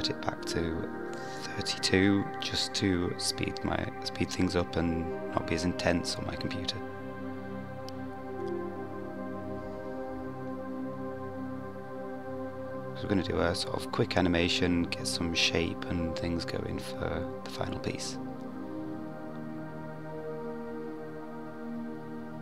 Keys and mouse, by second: 6.3-8.6 middle drag, 18.3-20.7 drag, 22.1 KP_1.